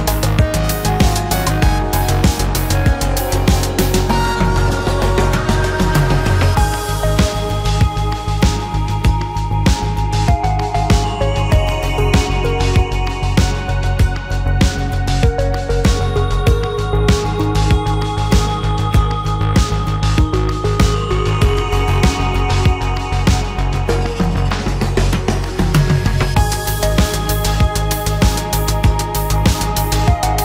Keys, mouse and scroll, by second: 9.9 shift+middle click, 11.7 shift+middle click, 13.1 shift+v, 14.3 Escape, 15.0 shift+a, 16.6 shift+v.